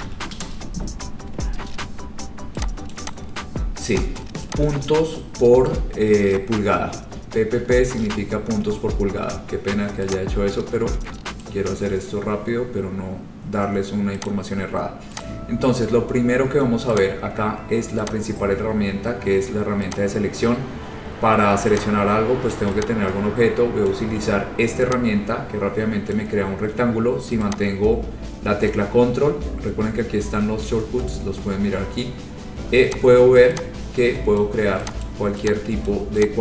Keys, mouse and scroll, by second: 0.0-1.2 typing, 1.5-2.2 scroll, 2.8-3.9 typing, 3.1 click, 3.3 click, 4.3 click, 5.7 click, 8.2 alt+Tab, 11.5 click, 12.5-13.7 scroll, 14.4 click, 15.3 click, 17.1 click, 18.2 click, 20.0 click, 21.9 click, 23.0 click, 24.0 ctrl+click, 26.3 click, 28.9 ctrl+click, 33.1 click, 34.5 click, 35.2 click, 36.0 click.